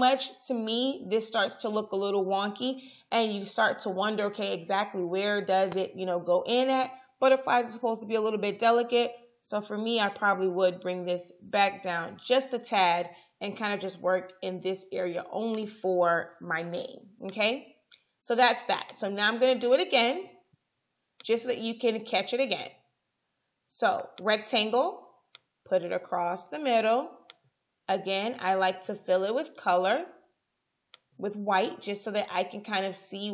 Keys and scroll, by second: 9.8 shift+Down, 11.4 Down, 16.4 Up.